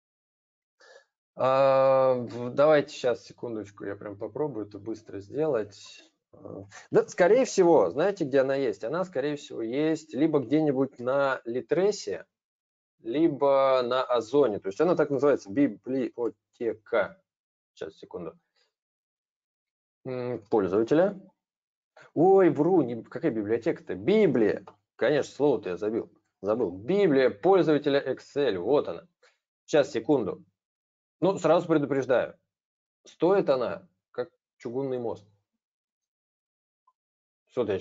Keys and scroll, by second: 10.9 super+space.